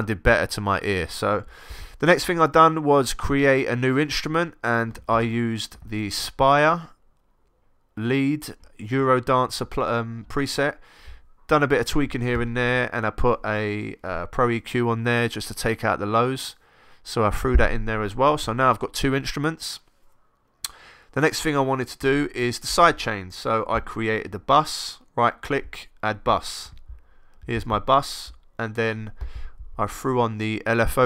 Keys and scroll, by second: 22.0 x.